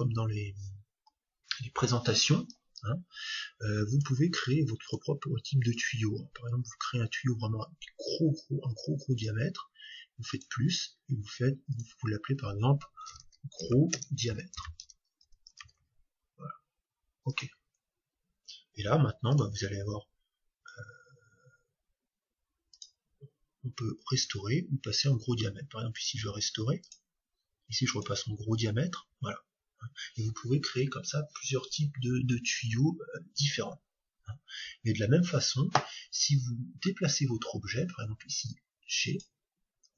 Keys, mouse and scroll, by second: 3.9-8.4 drag, 10.3-12.2 drag, 19.3-21.2 drag, 22.8-24.5 drag, 26.8-28.7 drag, 39.2-39.9 drag.